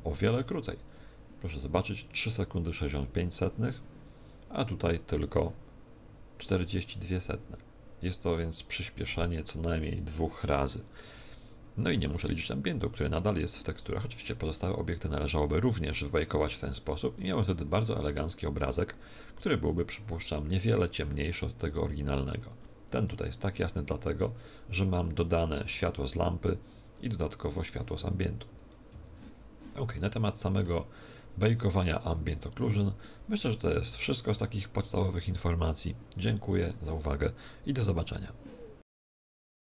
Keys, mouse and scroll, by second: 28.8 Escape, 30.6 middle click, 33.0 middle click, 34.3 middle click.